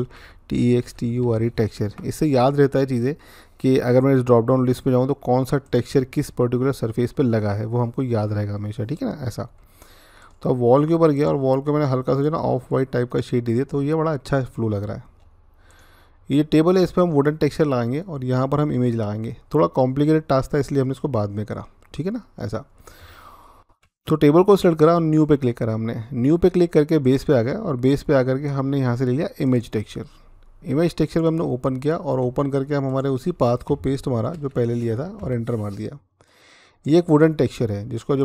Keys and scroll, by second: 0.0-2.1 typing, 34.1 ctrl+v, 35.0 Return.